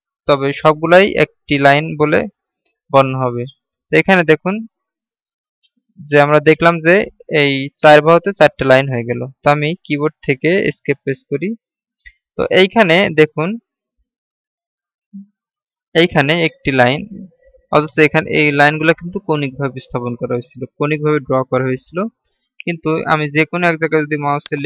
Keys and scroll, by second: 11.3 Escape.